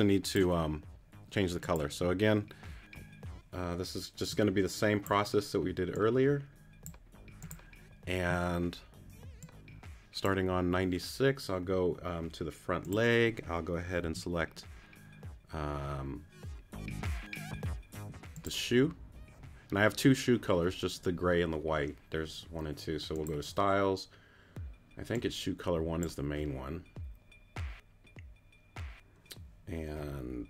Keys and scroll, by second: 14.0 q.